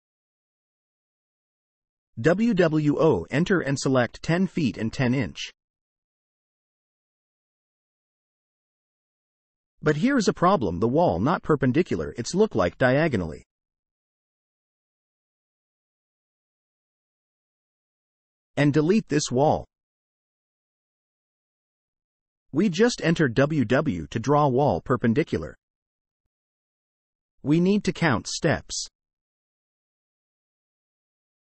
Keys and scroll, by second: 1.5 w, 2.6 o, 2.9 space, 4.3-6.2 typing, 8.7 Escape, 17.9 Delete, 19.2 Delete, 21.1 w, 21.6 space, 26.7 space.